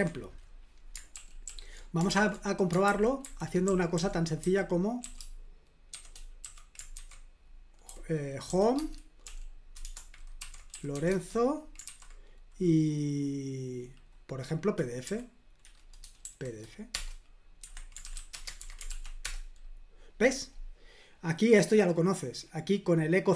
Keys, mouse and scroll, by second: 1.1 super+l, 1.5 super+k, 2.1 super+l, 2.9 super+h, 3.3 super+h, 3.4-11.9 typing, 8.8 Tab, 15.0 Down, 16.2 shift+p, 17.0 Return, 17.6 Escape, 17.8-18.6 typing, 18.9 ctrl+p, 19.2 Return, 22.1 click.